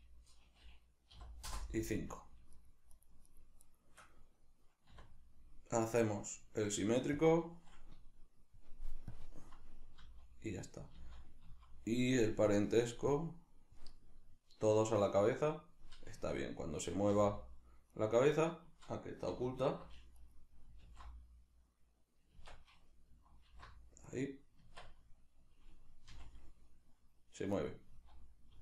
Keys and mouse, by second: 2.5 shift+right click, 2.9 shift+right click, 3.3 shift+right click, 3.6 shift+right click, 4.9 w, 9.1 click, 10.0 z, 12.5-14.0 drag, 14.0-18.0 middle drag, 16.2 Tab, 18.0 right click, 20.2 right click, 20.8 alt+h, 22.4 Tab, 23.5 alt+h, 24.1 right click, 24.6 Tab, 27.7 right click, 27.9 z.